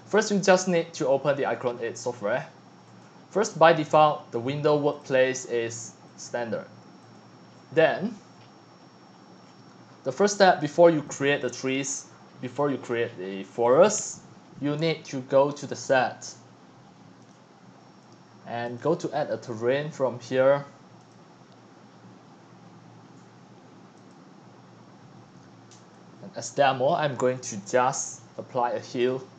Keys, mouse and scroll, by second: 2.9 click, 4.9 click, 6.0-9.4 drag, 9.4 scroll down 5, 9.6 middle click, 9.9 middle click, 10.3 middle click, 11.1 middle click, 11.8-13.7 typing, 13.5 click, 13.9-17.3 drag, 17.3-19.7 right drag, 21.0-21.6 drag, 24.0 click, 26.3-29.3 drag.